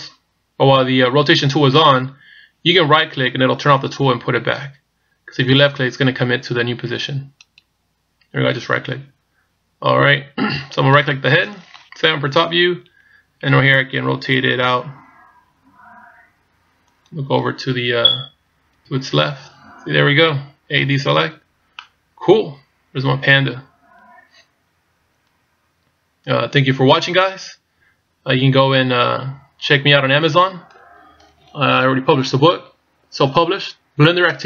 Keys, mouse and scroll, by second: 10.8 right click, 12.3 KP_7, 15.0 r, 18.8 KP_1, 20.9 a, 21.8 middle click.